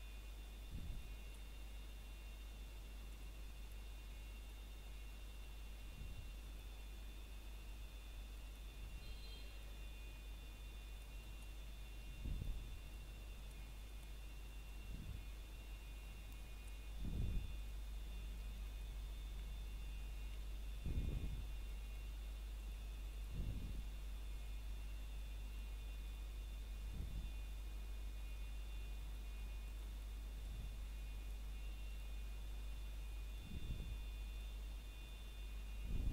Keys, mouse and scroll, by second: 2.3 a, 2.6 ctrl+right click, 3.5 click, 5.6 scroll down 1, 5.8 middle click, 9.9 scroll up 1, 10.2 middle click, 10.9 ctrl+right click, 12.9 click, 14.9 middle click, 16.0 scroll down 1, 16.3 shift+middle click, 17.0 scroll up 1, 17.3 shift+middle click, 18.0 ctrl+right click, 19.5 a, 20.1 ctrl+right click, 21.0 scroll down 1, 21.4 middle click, 22.4 scroll up 1, 23.3 click, 24.9 middle click, 25.8 scroll up 1, 25.9 middle click, 26.4 shift+middle click, 27.4-28.2 scroll up 1, 28.2 click, 29.3 middle click, 30.9 ctrl+right click, 32.7 click, 34.0 middle click, 35.9 scroll down 1.